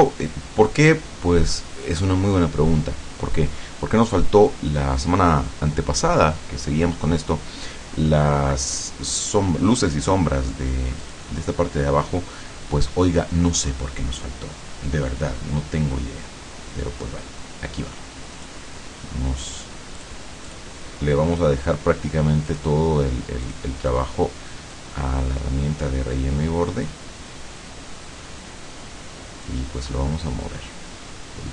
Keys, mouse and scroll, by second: 11.1 click, 12.9-18.7 drag, 20.0 click, 20.5 click, 22.6 click, 23.5 click, 24.8-27.1 drag, 29.5-31.5 drag.